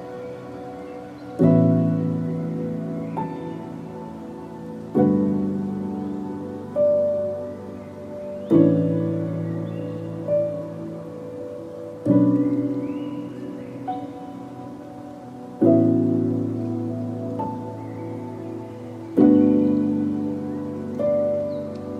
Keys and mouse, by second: 1.7 Tab, 2.0 ctrl+s, 2.2-3.9 drag, 4.4 KP_3, 5.5-6.1 shift+drag, 6.4-7.4 shift+drag, 9.1-10.2 shift+drag, 10.5-11.0 shift+drag, 11.6 shift+drag, 12.0 z, 12.8 shift+click, 15.6 ctrl+s, 16.1 z, 16.6-20.1 drag, 20.1 middle click, 20.2-20.9 drag, 20.4 middle click, 20.9-21.9 middle drag, 20.9-21.9 drag.